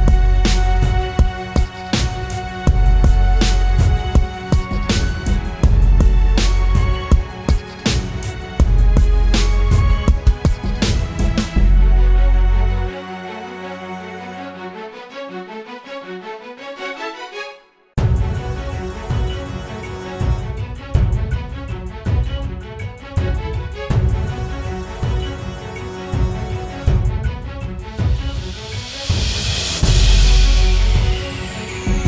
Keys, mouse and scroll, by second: 4.4 double click, 10.2 ctrl+t, 13.1 Return, 16.8 ctrl+=, 17.1 ctrl+=, 17.5 scroll down 1, 21.2-21.7 typing, 23.1 double click, 27.1 ctrl+=, 27.9 ctrl+-, 28.6 ctrl+-.